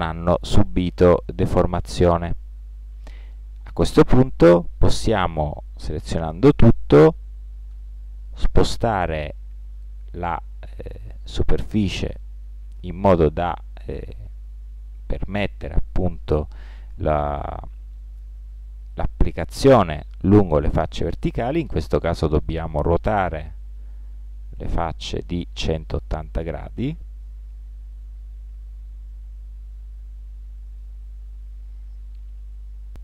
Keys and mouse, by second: 7.8 g, 12.8-14.9 middle drag, 23.1 r, 28.2 g, 31.9 middle click, 32.9 middle click.